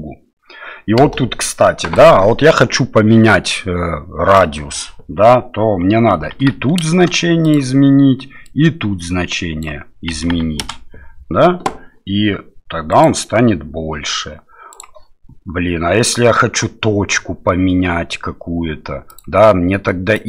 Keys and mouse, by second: 1.0 space, 2.0-7.1 drag, 7.4-10.8 drag, 14.8 click, 19.3-20.2 drag.